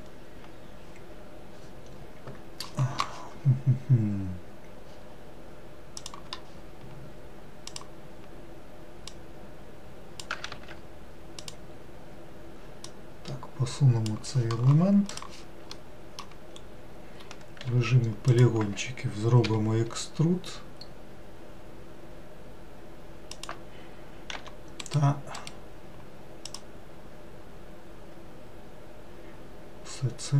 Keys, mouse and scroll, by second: 6.1-7.8 drag, 9.2 click, 10.6 ctrl+z, 11.5 click, 12.9 click, 15.9 middle click, 16.6-17.7 scroll up 2, 17.8 3, 18.4 click, 24.4 e, 25.4-28.4 right drag.